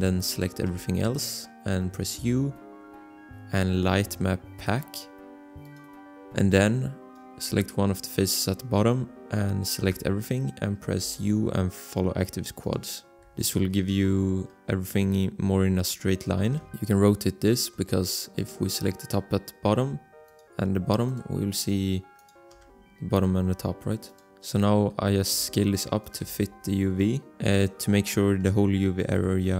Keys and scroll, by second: 0.6 a, 2.1 u, 10.0 a, 11.0 u, 13.2 a, 16.4 r, 22.5 a, 24.3 g, 25.3 s, 26.2 g, 29.1 s.